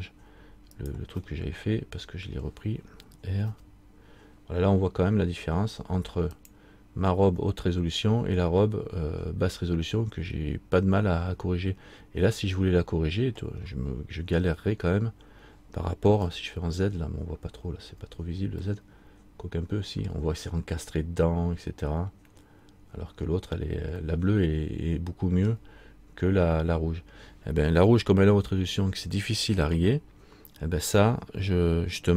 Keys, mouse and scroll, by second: 1.4 middle click, 3.7 r, 13.8-14.1 scroll up 1, 16.4-17.4 scroll up 3, 16.4 z, 17.6 z, 18.9 middle click, 22.0 z, 24.3 middle click.